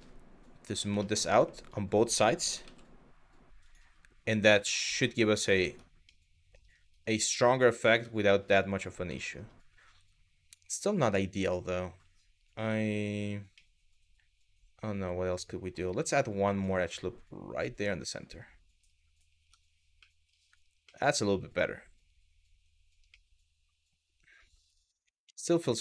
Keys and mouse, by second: 0.3 click, 0.7 shift+middle click, 1.3 alt+click, 2.0 g, 2.3 z, 3.2 click, 4.5 click, 5.3 Tab, 5.8-6.3 middle drag, 6.8-7.2 middle drag, 7.4 click, 7.5 Tab, 8.8 shift+middle click, 13.3-15.4 middle drag, 16.2 click, 17.5 click, 19.0 Tab, 19.7 middle drag, 20.5-22.3 middle drag, 22.8-23.7 middle drag, 24.9 KP_3.